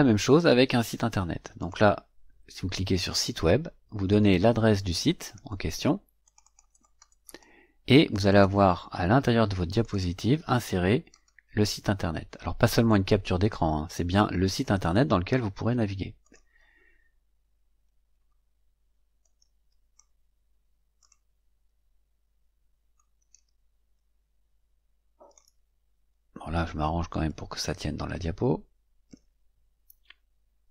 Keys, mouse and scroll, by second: 1.5 click, 2.9 click, 5.1 click, 6.1 click, 6.7 click, 7.2 right click, 8.2 click, 9.7 click, 11.0 right click, 12.8 click, 16.1 click, 19.1-20.1 drag, 20.9 click, 22.9-25.5 drag, 25.8-26.2 scroll down 1, 27.2-29.2 drag.